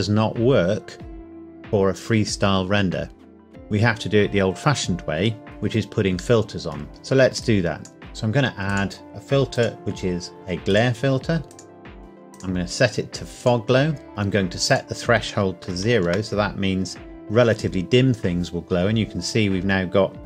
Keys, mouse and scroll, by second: 5.4 click, 6.4 middle click, 6.9 click, 12.0-12.3 scroll up 1, 12.3 click, 14.1 scroll up 1, 14.7 click, 15.6 KP_0, 16.1 KP_Enter, 19.2 scroll up 1.